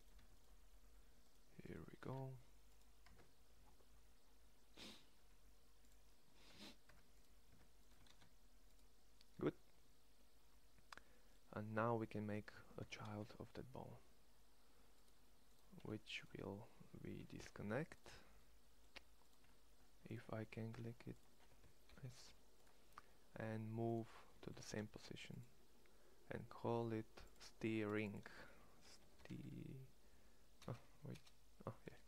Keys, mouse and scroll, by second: 1.8 shift+s, 2.7 click, 3.0 Tab, 6.5 Tab, 6.8 Tab, 7.3 Tab, 7.9 shift+s, 12.6 e, 15.7 click, 21.6 alt+p, 24.4 shift+s, 29.0 e.